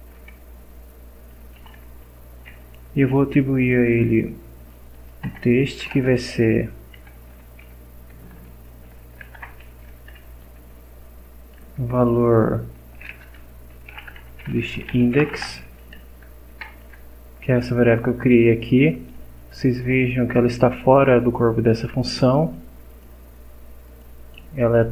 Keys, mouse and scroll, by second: 1.3-2.2 typing, 5.2 Return, 5.8-9.3 typing, 9.9 Left, 10.2 Up, 11.0 Down, 11.4 End, 11.6 Left, 13.0-15.9 typing, 13.4 Left, 16.3 Left, 16.6 Right, 18.9 click, 21.3-22.7 drag, 22.9 click, 23.8 click.